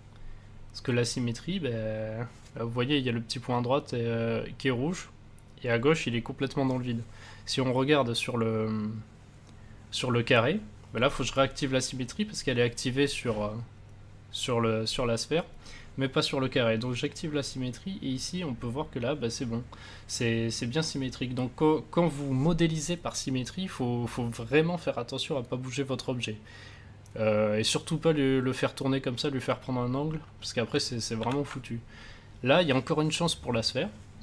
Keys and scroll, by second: 31.2 ctrl+z.